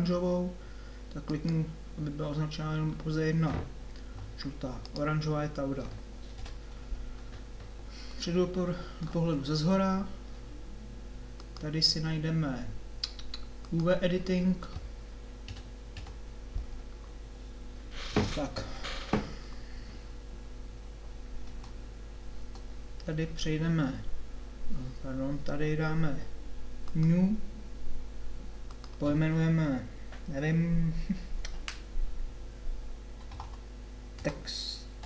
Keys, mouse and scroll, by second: 4.0 g, 6.4 KP_7, 8.4-9.8 middle drag, 11.4-13.3 drag, 15.5 KP_7, 15.9 KP_5, 21.4 Tab, 22.4 Tab.